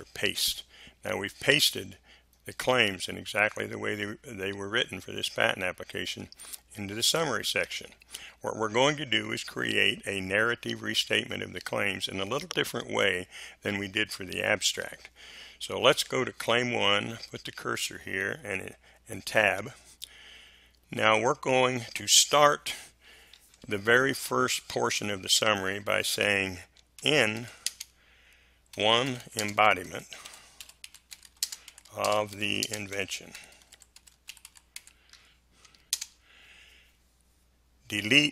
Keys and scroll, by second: 19.5 Tab, 26.9-35.9 typing.